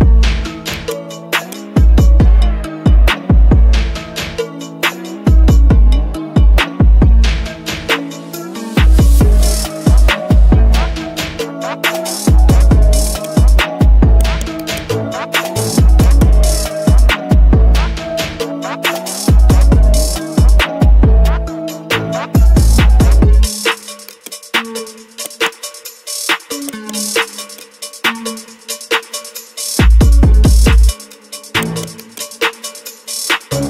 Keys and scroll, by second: 5.5 ctrl+d.